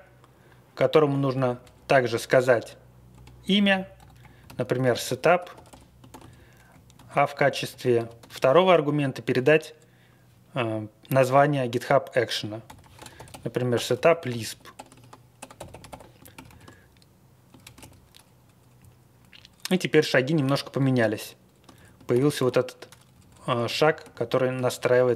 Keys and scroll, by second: 1.5 Right, 3.1 BackSpace, 3.5 Down, 3.9 Up, 4.2 End, 4.2-6.2 typing, 6.3 Page_Down, 6.7 Right, 6.9 Tab, 7.2 Right, 7.4 Right, 7.5 Right, 7.6 Right, 8.0 ctrl+w, 8.1 ctrl+w, 12.4-16.3 typing, 16.4 ctrl+c, 17.6 ctrl+x, 17.7 typing, 18.7-19.2 Left, 19.1 Left, 19.6 Up, 20.4 Down, 21.7 Down, 22.1 ctrl+c, 22.3 b, 23.1 Up, 23.2 Up, 23.4 Up, 23.7 ctrl+c, 24.0 b, 24.2 Down, 24.4 Down, 24.5 Down.